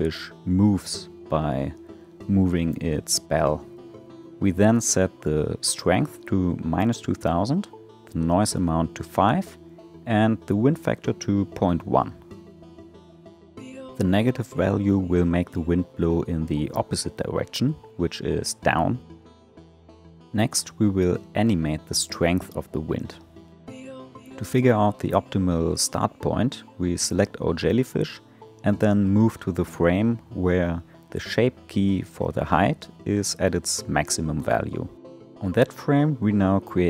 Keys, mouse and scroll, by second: 3.2-5.6 drag, 5.6 0, 5.8 0, 9.5-12.5 drag, 14.1-18.5 drag, 20.7-21.4 shift+middle drag, 21.4 space, 24.6 space, 26.0 click, 28.3 click, 34.2 click.